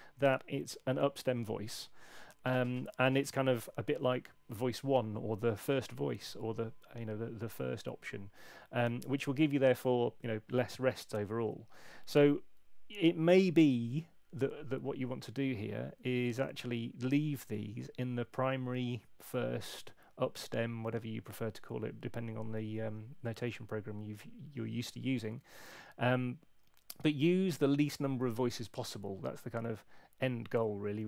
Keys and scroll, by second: 16.3 super+2.